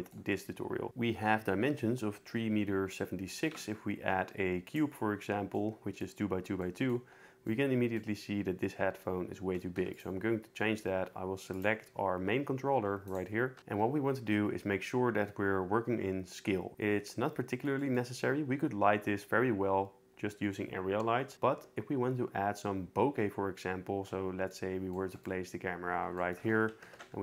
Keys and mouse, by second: 3.4 shift+a, 9.8 x, 11.5 click, 11.9 g, 13.0 right click, 13.5 n, 17.5 shift+middle click, 26.8 ctrl+alt+KP_0.